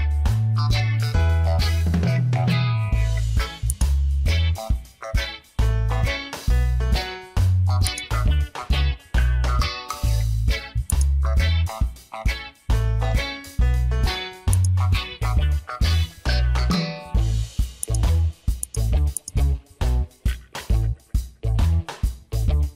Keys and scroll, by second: 5.3 Return, 10.2 ctrl+t, 13.4 Return.